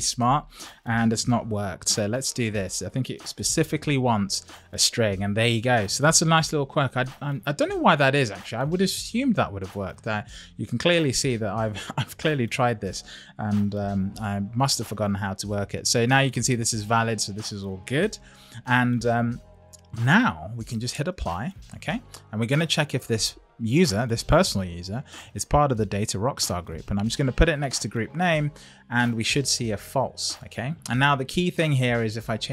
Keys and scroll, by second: 2.0 shift+', 2.6 Left, 3.3 super+v, 14.0 Up, 18.9 Up.